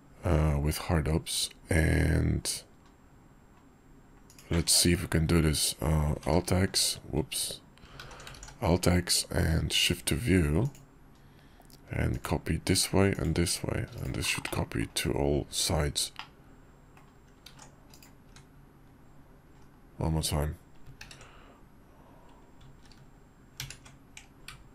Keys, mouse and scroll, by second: 6.2 alt+z, 8.0 alt+z, 8.3 alt+x, 9.7-11.2 drag, 12.3-13.6 shift+drag, 14.5-14.9 drag, 15.0 KP_5, 16.2 click, 17.4 alt+x, 18.3 `, 19.6 KP_5, 23.5 ctrl+q.